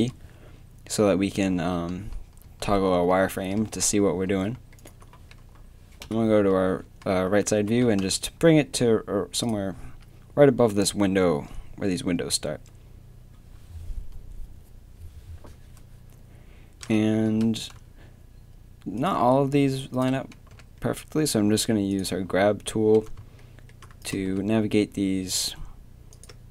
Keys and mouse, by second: 0.0 z, 0.1 t, 1.3 z, 1.6 z, 2.4 z, 2.9 z, 4.3 z, 4.3 KP_1, 6.0 KP_3, 7.7 g, 9.8 z, 17.3 g, 20.5 g, 24.0-26.1 middle drag, 24.3 g.